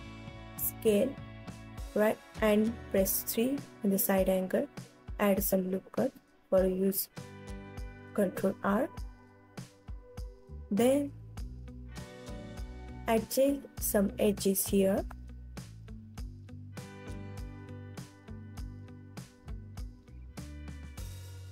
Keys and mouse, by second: 2.0 middle click, 2.4 click, 3.4 click, 4.1 g, 5.6 click, 6.5 ctrl+r, 8.3 click, 9.3 click, 10.0 g, 12.7 click, 13.5 ctrl+r, 14.9 click, 15.7 g, 17.7 click, 18.4 ctrl+r, 20.0 g.